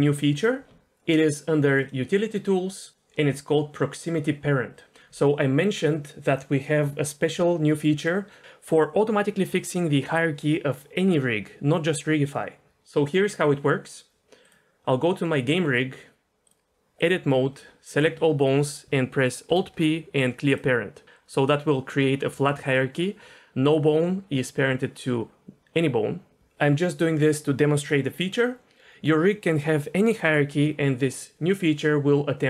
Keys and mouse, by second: 1.7 click, 16.5 click, 18.0 a, 19.5 alt+p.